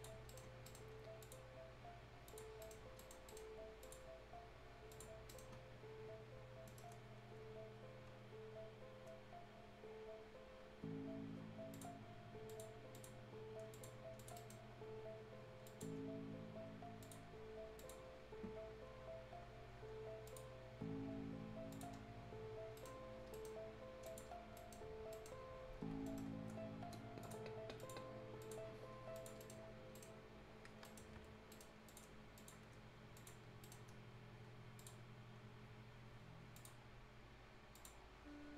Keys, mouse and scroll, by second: 0.1-0.6 scroll up 2, 0.2 right click, 0.6 right click, 1.2 click, 2.4 scroll down 1, 2.6 right click, 2.8 scroll up 1, 2.9 right click, 3.8 click, 5.1 scroll down 1, 5.2 right click, 5.5 scroll up 1, 6.6 middle click, 11.7 click, 13.1 scroll down 1, 13.3-13.7 scroll up 1, 13.7 click, 14.3 right click, 14.6 scroll down 1, 15.2-15.6 scroll up 1, 15.6 click, 15.9 scroll up 1, 17.0 click, 18.0-18.4 scroll down 1, 18.4-19.1 scroll up 1, 20.2 click, 21.9-22.4 scroll down 1, 22.4-22.7 scroll up 1, 22.7 right click, 23.1 scroll down 1, 23.3 right click, 23.5-24.0 scroll up 1, 24.0 click, 24.0 click, 24.5 right click, 24.8 scroll up 1, 25.1 right click, 25.3-25.8 scroll up 1, 26.0 middle click, 26.0 middle click, 26.1-27.2 scroll up 1, 27.2 click, 29.4 right click, 29.5 scroll down 1, 29.9 right click, 30.6 scroll down 1, 30.8 right click, 31.1-31.5 scroll up 1, 31.5 right click, 31.8 click, 33.6 right click, 34.7 click, 36.5 click, 37.9-38.2 scroll down 1, 38.2-38.5 scroll up 1.